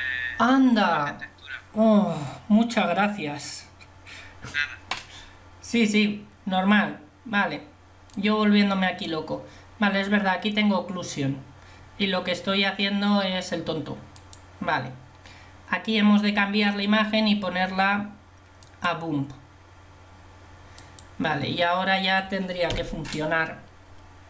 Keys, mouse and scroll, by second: 23.4 Delete.